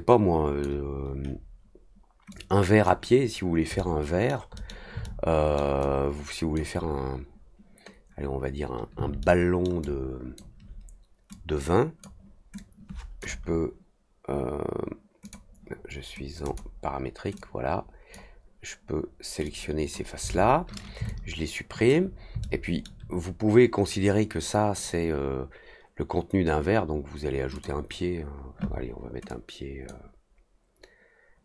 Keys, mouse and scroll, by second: 2.2-2.8 drag, 3.7 middle click, 4.5 middle click, 5.0-5.5 alt+middle drag, 5.7 alt+click, 9.1 alt+middle click, 9.8-10.3 alt+drag, 11.2-12.0 drag, 12.5 click, 15.2 click, 16.4 click, 17.3 click, 19.4 click, 21.0-21.8 alt+drag, 22.4 alt+middle click, 27.5 click, 29.2-29.8 drag.